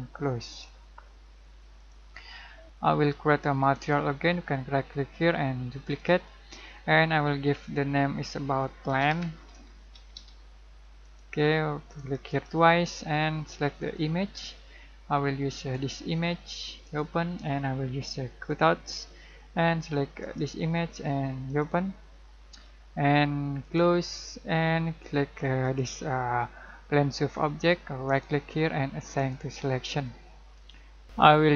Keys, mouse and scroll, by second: 2.6 ctrl+z, 3.7 right click, 5.8 click, 8.6-10.6 typing, 11.0 click, 28.0 right click, 29.1 click.